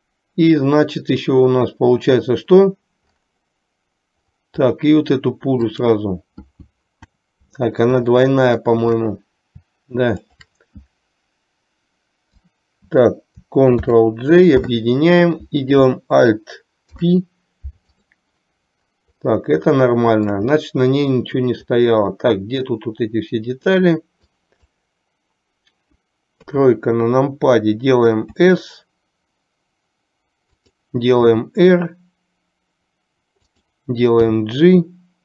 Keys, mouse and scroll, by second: 5.9 drag, 8.4-8.8 shift+middle drag, 10.4 shift+click, 13.9 ctrl+j, 16.9 alt+p, 20.1 shift+middle click, 24.4-24.9 drag, 26.6 KP_3, 28.3 s, 31.3 r, 34.3 g.